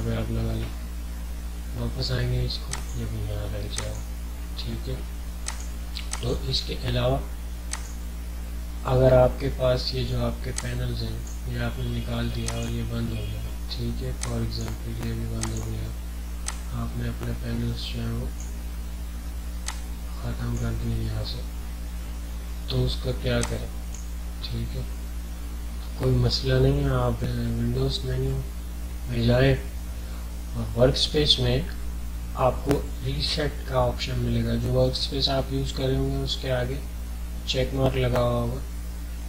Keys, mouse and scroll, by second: 2.7 click, 10.6-22.9 drag, 22.8-23.4 typing, 23.4-26.4 drag, 27.3 click, 27.3 typing.